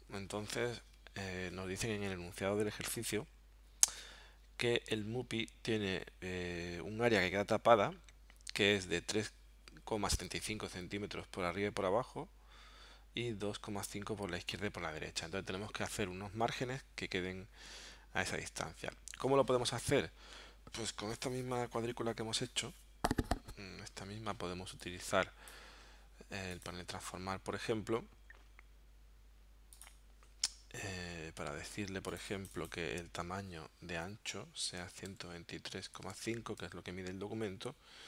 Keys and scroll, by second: 34.7-36.2 typing.